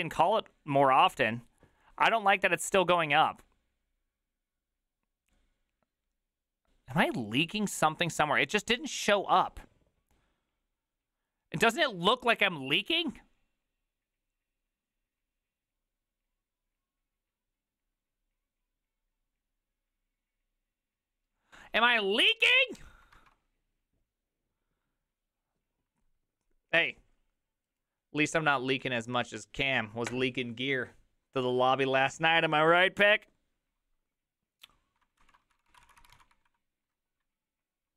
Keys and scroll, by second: 35.3-37.0 typing.